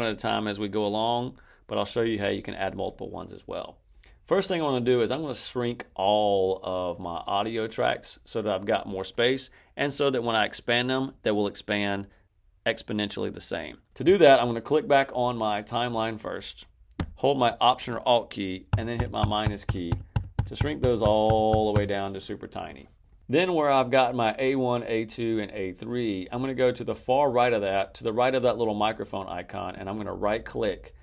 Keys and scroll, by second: 18.6 alt+-, 19.2 alt+-, 20.3 alt+-.